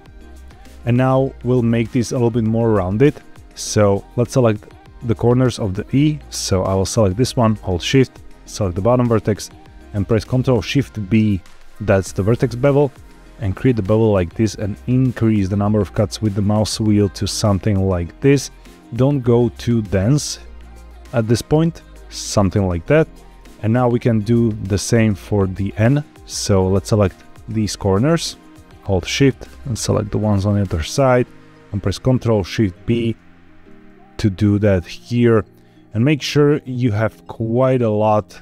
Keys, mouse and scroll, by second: 0.0 scroll up 1, 0.3 shift+middle click, 4.3 click, 8.0 shift+click, 11.1 ctrl+shift+b, 14.0 scroll up 1, 14.7-15.2 scroll up 1, 17.2-18.2 scroll up 1, 18.2-20.3 scroll down 1, 22.3 click, 23.9 shift+middle click, 26.1 click, 27.2 shift+click, 28.8 shift+click, 29.7 shift+click, 32.7 ctrl+shift+b, 36.0-36.7 scroll up 1, 36.7-37.1 scroll down 1.